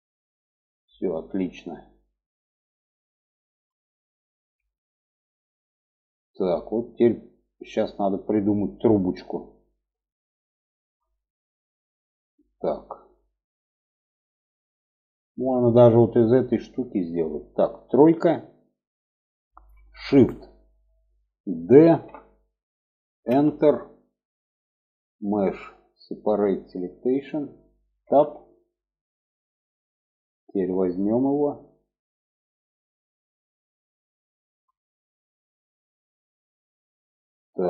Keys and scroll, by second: 17.3 3, 21.1 shift+d, 27.4 Tab, 37.4 Tab.